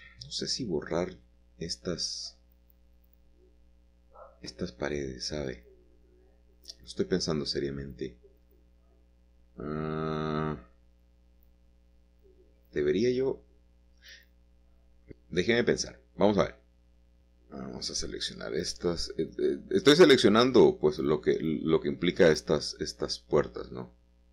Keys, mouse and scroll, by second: 0.2 shift+click, 2.5 shift+click, 2.9-3.6 scroll down 1, 4.4-6.0 scroll up 1, 6.2 shift+click, 7.0 middle click, 10.0 shift+click, 10.7 shift+click, 12.0 shift+click, 12.7-14.6 middle drag, 14.6 shift+click, 15.6-16.1 scroll down 1, 16.1-19.5 middle drag, 20.1 shift+click, 20.9 shift+click, 22.1 shift+click, 23.0 shift+click.